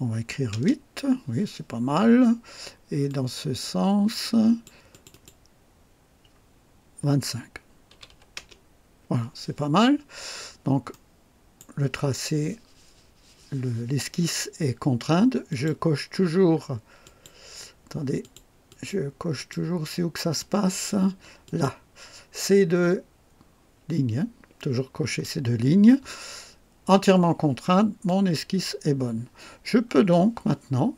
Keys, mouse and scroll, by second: 0.1 KP_8, 0.5 Return, 3.0-4.8 drag, 4.9 click, 7.9 KP_2, 8.0 KP_5, 8.3 Return, 10.0 scroll down 3, 10.8 right click, 15.4 click, 17.0 click, 18.1 click, 18.6 click, 19.3 click, 21.4 click, 25.0 click, 28.0 click, 29.5 scroll down 1.